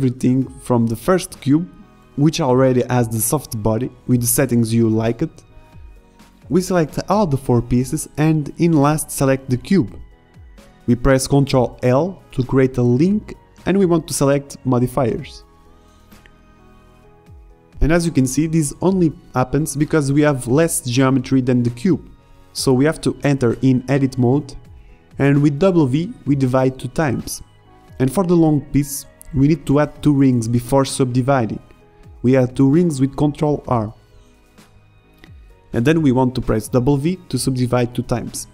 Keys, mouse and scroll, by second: 1.4 KP_0, 1.5 KP_Enter, 2.8-4.7 middle drag, 7.2-7.7 drag, 10.0 ctrl+l, 21.1 Tab, 21.8 a, 22.8 w, 24.1 w, 25.0 w, 26.7 Tab, 29.6 middle click, 30.3 ctrl+r, 33.7 a, 33.9 a, 34.2 w, 35.4 w, 38.2 middle click.